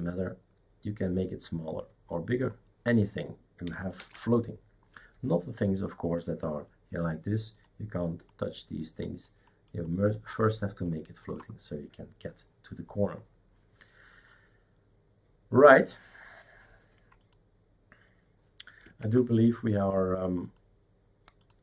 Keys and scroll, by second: 4.0 shift+super+q, 19.0 shift+super+q.